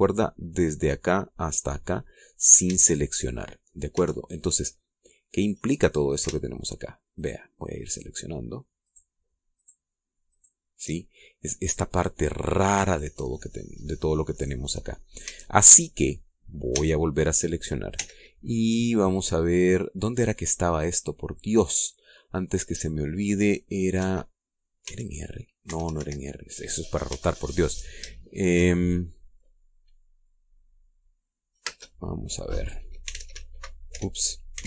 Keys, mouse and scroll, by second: 3.3 a, 4.6 a, 5.1 middle click, 7.2 alt+shift+right click, 7.8 alt+shift+right click, 8.5 alt+shift+right click, 9.5 alt+shift+right click, 10.2 alt+shift+right click, 11.0 alt+shift+right click, 15.9 a, 17.4 a, 18.6 w, 24.7 Escape, 25.5 r, 26.3 Escape, 27.4-27.7 scroll down 2, 27.9 shift+middle click, 28.8 shift+middle click, 29.4 shift+middle click, 33.7-34.6 typing.